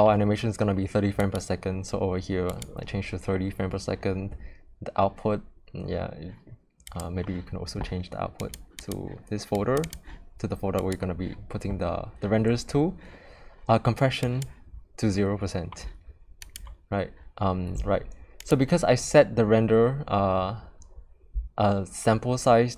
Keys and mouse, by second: 1.2-2.6 drag, 6.9 click, 14.3 click, 16.4 click, 18.4 click.